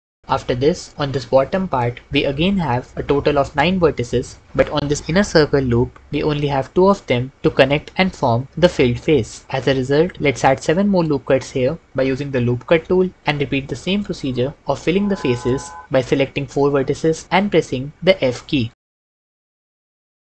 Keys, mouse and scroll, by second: 9.4 Escape, 10.6 ctrl+r, 11.8 s, 12.6 7, 13.1 Return, 16.2 f, 18.7 ctrl+z, 18.7-20.3 typing.